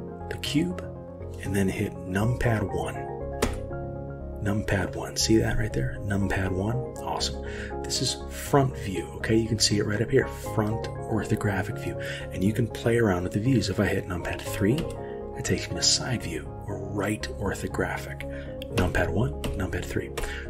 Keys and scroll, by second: 3.5 KP_1, 14.8 KP_3, 18.8 KP_1, 19.5 KP_3, 20.2 KP_1.